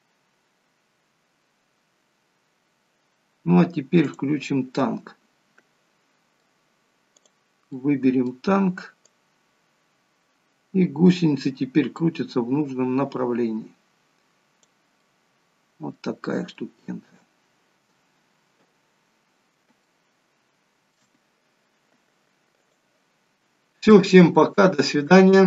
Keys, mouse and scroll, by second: 4.2 click, 4.9 middle click, 7.9 middle click, 9.3 click, 15.1 middle click, 16.7 shift+middle click, 17.7-19.7 scroll up 2, 19.9 shift+middle click, 22.8 click, 23.4-25.4 scroll down 1.